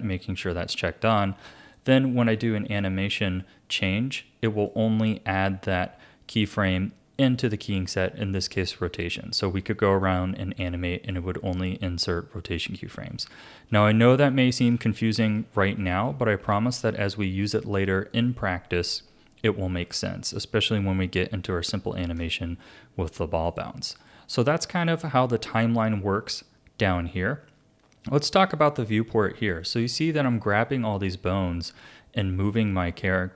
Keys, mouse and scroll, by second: 1.7 click, 3.8 click, 10.0 click, 13.2 ctrl+z, 13.7 ctrl+z, 14.2 ctrl+z, 14.8 ctrl+z, 15.4 ctrl+z, 15.9 ctrl+z, 16.5 ctrl+z, 18.1-19.8 drag, 19.8 a, 20.5-23.5 shift+middle drag, 23.5 click, 24.0-27.1 drag, 29.6 click, 30.7 r.